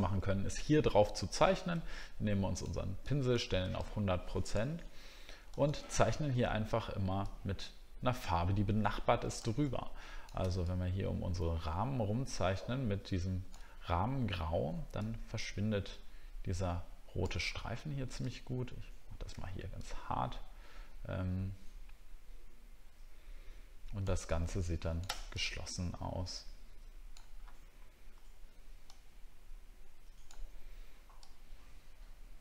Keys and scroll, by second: 13.8 alt+scroll down 1.